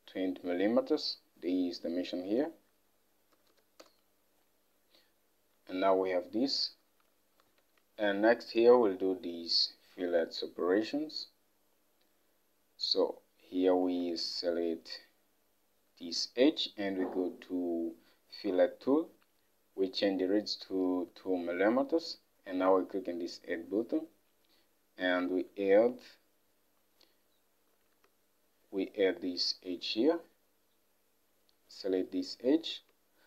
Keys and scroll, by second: 3.4 typing, 3.9 Return, 5.7-6.4 typing, 7.1 Home, 7.7 alt+Tab, 21.2 2, 25.5 alt+Tab.